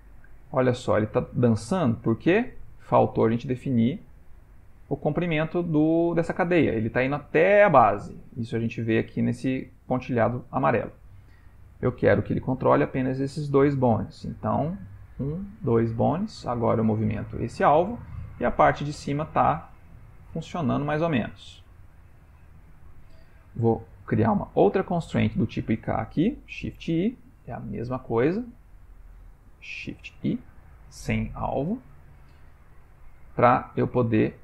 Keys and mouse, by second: 3.8 click, 14.9 click, 15.5 click, 17.2 g, 23.9 click, 26.8 shift+i, 28.0 click, 28.6 click, 30.0 shift+i, 33.1 click.